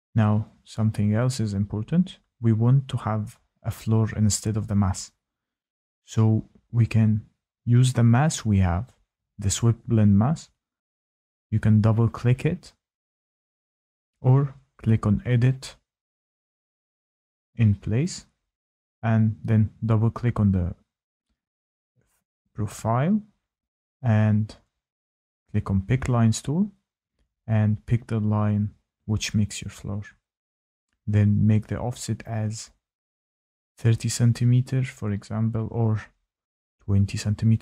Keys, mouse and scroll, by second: 3.6 scroll, 8.5 click, 15.7 click, 17.1 click, 19.4 click, 19.6 click, 20.2-21.1 scroll, 21.3 click, 21.5 click, 22.6-23.5 scroll, 23.5 click, 25.9-26.5 scroll, 26.5 scroll, 26.8 click, 27.3-31.1 scroll, 31.1 scroll, 31.2 click, 32.7-33.3 typing, 36.7-37.4 typing, 36.8 click.